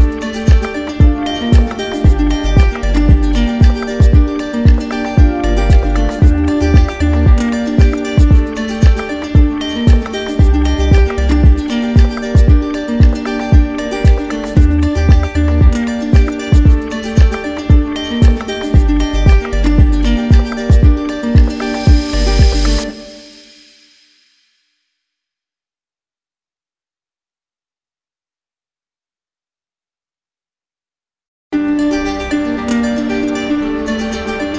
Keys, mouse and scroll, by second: 1.2 click, 3.4 click, 5.5-6.6 drag, 8.1 click, 10.2 click, 12.2 click, 13.8-15.0 drag, 16.4-17.5 drag, 18.3-19.4 drag, 20.7 click, 23.1 click, 24.1 ctrl+z, 26.4 click.